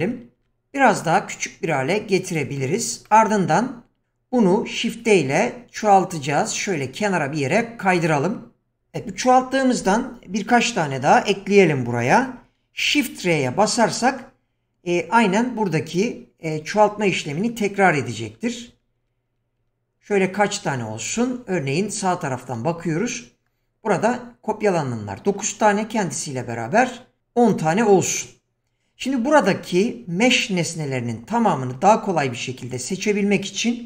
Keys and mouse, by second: 0.0 s, 0.8 s, 3.8 middle drag, 4.7 shift+d, 18.4-20.7 typing.